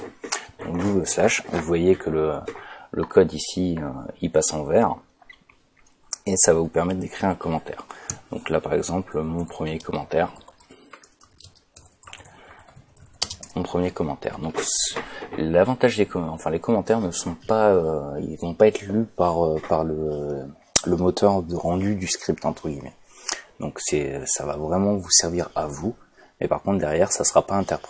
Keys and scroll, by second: 9.0-13.5 typing.